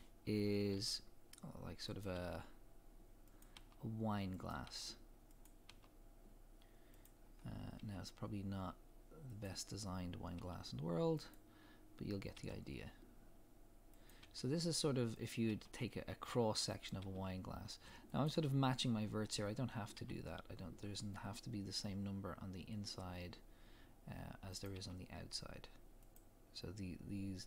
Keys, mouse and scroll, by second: 0.8 e, 2.0 click, 2.1 e, 3.4 click, 3.5 e, 4.5 click, 5.4 click, 5.7 e, 7.0 click, 7.2-7.7 scroll down 1, 7.7 e, 9.4 click, 10.3 e, 11.3 click, 12.3 e, 14.1 click, 14.2 e, 15.3 click, 15.5 e, 16.9 click, 17.0 e, 18.2 click, 19.3 scroll up 1, 19.9 e, 24.6 click, 24.7 e, 26.1 click.